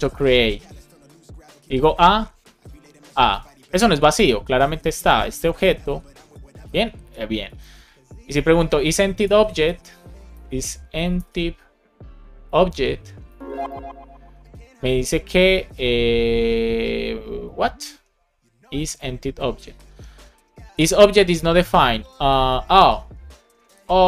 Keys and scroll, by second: 0.3-3.4 typing, 4.1 Right, 4.8 Return, 7.5 super+Left, 9.2 shift+e, 10.4 BackSpace, 12.4 Return, 12.7 shift+9, 13.3 super+Right, 13.6 shift+0.